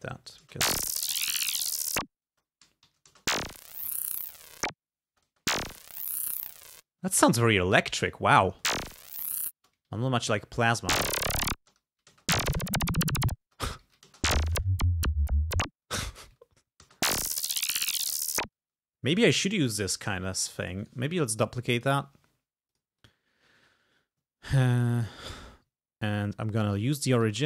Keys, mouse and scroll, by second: 0.1 alt+Up, 0.5 alt+space, 2.3 space, 2.9 alt+Up, 3.2 alt+space, 5.1 space, 6.9 space, 8.5 space, 9.6 space, 9.9 alt+Down, 10.8 alt+space, 11.6 space, 11.9 alt+Down, 12.1 alt+space, 13.4 space, 13.9 alt+Down, 14.1 space, 15.9 space, 16.2 alt+Up, 16.9 space, 18.6 space, 20.7 click, 20.9 right click, 21.8 click, 22.7 click, 23.0 click, 26.7 click, 27.1 click.